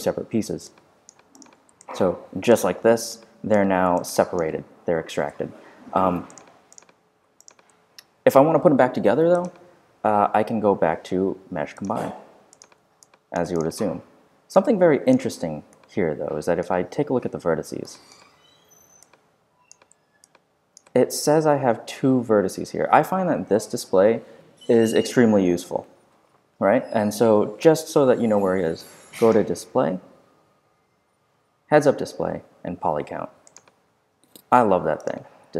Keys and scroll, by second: 5.2 super+z, 15.2 z.